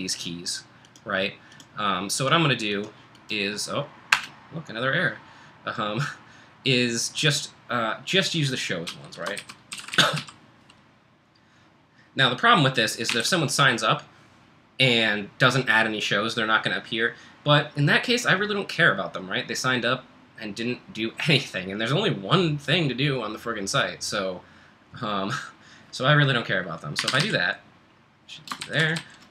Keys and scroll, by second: 4.1 Return, 8.6-10.7 typing, 12.9-13.6 typing, 26.7-29.3 typing.